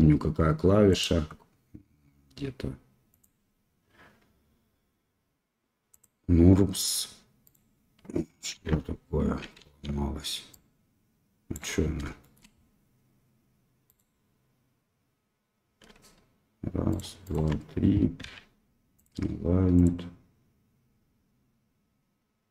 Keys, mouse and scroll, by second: 0.9-2.2 drag, 3.1-6.0 drag, 7.4 click, 8.5 ctrl+z, 8.5 ctrl+x, 10.5-11.5 drag, 12.2 shift+middle click, 13.8 click, 16.9 shift+click, 18.2 v, 19.8-22.5 drag.